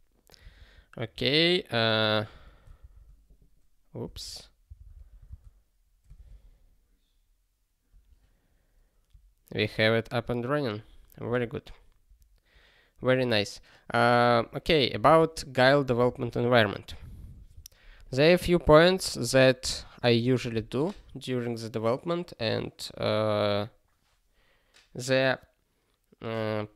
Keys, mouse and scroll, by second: 12.9 ctrl+s, 14.9 ctrl+n, 15.0 ctrl+n, 15.5 ctrl+p, 17.1 ctrl+s.